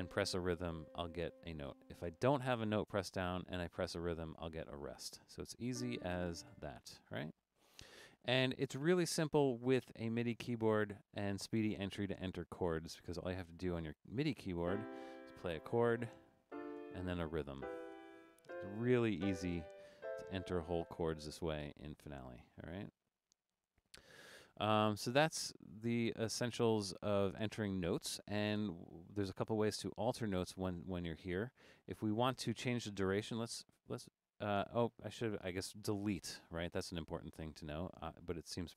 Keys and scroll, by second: 4.2 5, 6.3-7.0 typing, 15.8 5, 16.8 typing, 18.0-20.3 typing.